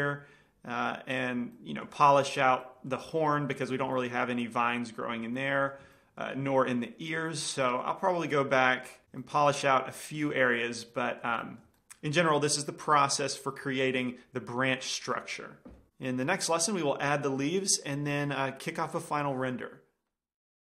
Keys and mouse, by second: 1.7 click, 2.2-3.5 drag, 5.8-6.1 middle drag, 6.2 middle drag, 9.2 middle click, 10.0-13.6 middle drag.